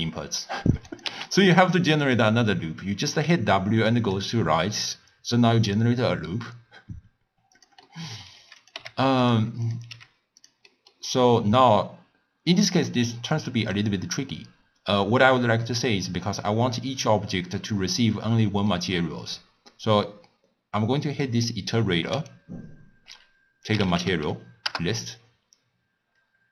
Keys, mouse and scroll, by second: 0.9 click, 1.5 x, 2.0 click, 3.2 w, 7.9 middle click, 8.6 click, 8.8 g, 9.7 click, 9.9 g, 10.7-12.7 middle drag, 12.7 click, 13.4 click, 16.5-21.7 middle drag, 22.2-26.5 drag.